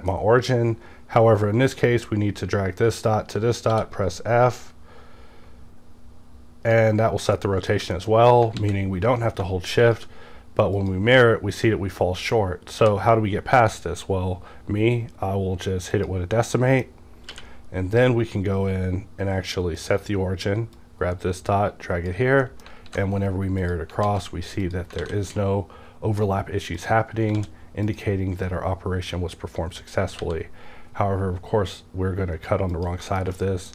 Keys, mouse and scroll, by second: 1.8-7.4 drag, 3.7 f, 7.4 middle click, 7.9 shift+middle click, 8.6 alt+x, 9.8 shift+click, 9.8 shift+click, 10.8 shift+click, 11.9 scroll up 2, 12.3-12.8 middle drag, 12.8 q, 15.9 click, 16.6 middle click, 17.3 q, 19.8 click, 20.8-22.8 drag, 22.4 middle click, 22.8 alt+x, 23.6 click, 24.0 alt+x, 24.6 click, 25.0 alt+a, 26.8 click, 27.3 d, 27.9 click, 28.5-32.3 drag, 30.2 g, 32.7 click, 33.1 KP_Decimal, 33.4 middle click.